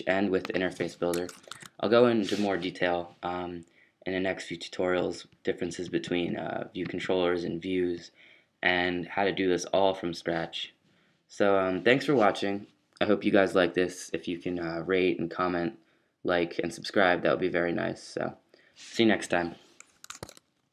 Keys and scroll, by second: 1.1 BackSpace, 1.3 BackSpace.